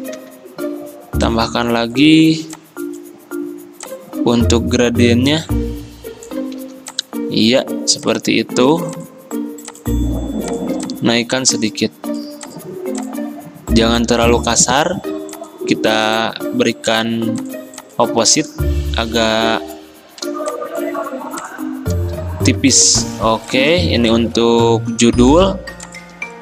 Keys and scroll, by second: 0.3 g, 6.8 v.